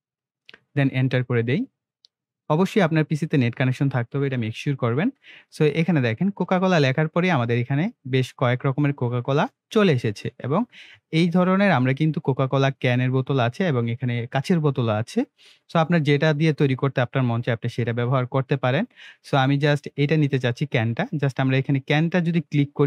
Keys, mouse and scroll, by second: 0.0-0.5 typing, 0.7 Return.